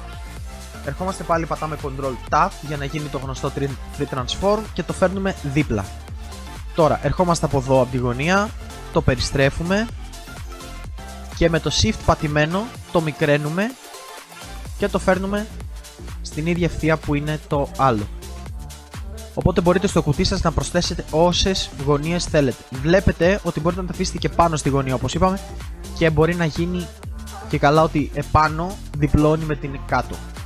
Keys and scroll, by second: 1.1 ctrl+v, 2.0 ctrl+t.